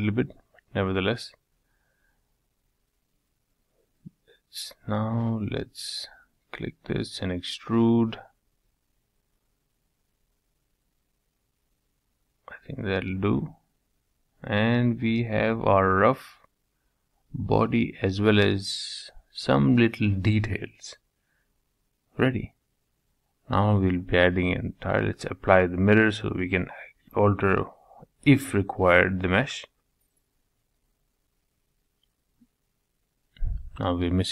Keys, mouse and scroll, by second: 0.8 3, 1.4 click, 2.3-3.3 drag, 3.8-4.3 scroll up 2, 4.3 click, 4.8 click, 5.6 middle click, 6.1-6.5 scroll down 1, 6.5-8.2 middle drag, 8.2 e, 11.5-11.9 scroll down 4, 11.9-13.8 middle drag, 16.2-17.6 middle drag, 17.6 Tab, 17.8-19.8 middle drag, 20.8-24.1 shift+middle drag, 24.1 click, 24.5-26.4 middle drag, 26.5-30.0 middle drag, 33.2-34.3 middle drag.